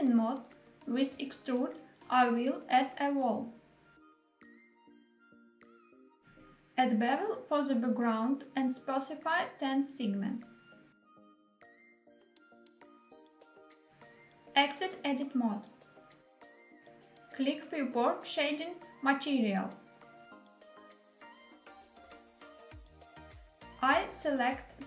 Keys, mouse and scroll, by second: 0.4 middle click, 2.0 click, 2.8 e, 3.2 z, 5.5 click, 6.2 middle click, 6.9 click, 9.2 click, 11.6-13.3 drag, 13.8 click, 14.3 Tab, 15.3 click, 21.3 click, 23.9 click.